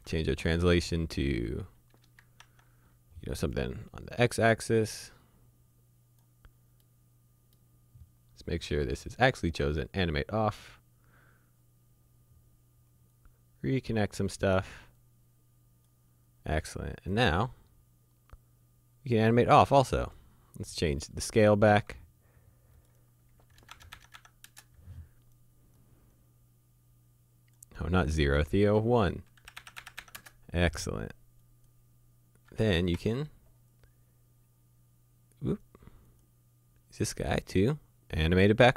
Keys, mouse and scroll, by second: 2.0 KP_0, 2.4 shift+Tab, 3.4 click, 5.2 click, 6.8 middle click, 8.8 click, 13.1 click, 20.5-20.9 scroll down 1, 21.0 shift+middle click, 22.8 click, 23.6 KP_0, 23.7 Tab, 23.8 KP_0, 23.9 Tab, 24.0 KP_0, 24.2 Tab, 24.5 KP_Enter, 25.8 click, 29.5 KP_1, 29.6 Tab, 29.7 KP_1, 29.8 Tab, 29.9 KP_1, 30.0 Tab, 30.2 KP_Enter, 31.4 click, 33.1 Escape, 33.7 click.